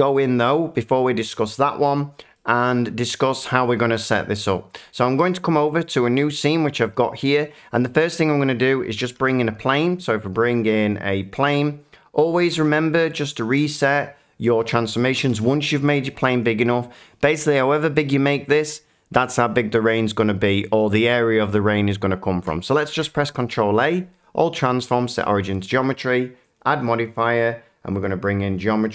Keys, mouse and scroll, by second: 1.8 shift+middle click, 2.7 shift+middle click, 5.2 shift+middle click, 6.1 middle click, 7.0 shift+middle click, 7.9 click, 9.2 a, 10.9 click, 11.3 click, 13.4 click, 15.3 click, 15.3 s, 16.4 click, 22.9 ctrl+a, 23.5 click, 24.2 middle click, 25.2 click, 26.5 click, 27.2 click, 28.0 click.